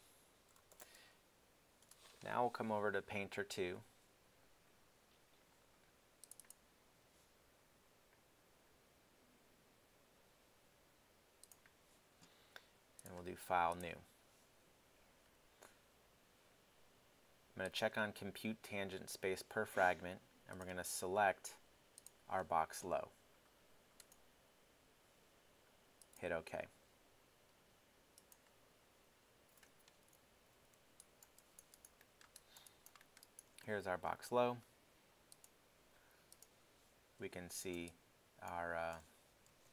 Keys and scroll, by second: 0.3-1.4 typing, 1.8 Return, 30.5 f, 39.5 shift+super+z.